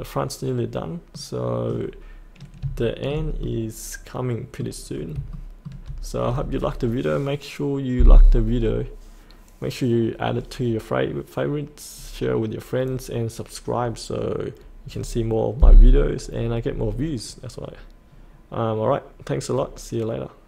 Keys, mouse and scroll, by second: 1.1 middle click, 1.8 scroll up 1, 2.7 shift+middle click, 3.4 middle click, 4.8-5.1 scroll down 1, 5.3 shift+middle click, 11.9-15.3 scroll up 1.